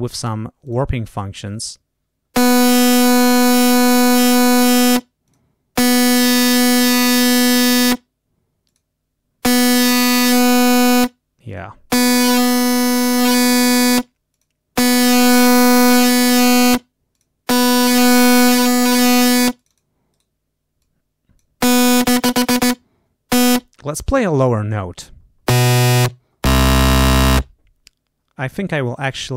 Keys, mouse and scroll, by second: 0.5 click, 1.4-4.9 drag, 5.2 click, 6.0-8.0 drag, 8.6 click, 9.6-10.9 drag, 11.4 click, 12.0-13.9 drag, 14.3 click, 14.8-16.8 drag, 17.1 click, 17.7-19.9 drag, 20.1 right click, 20.8 click.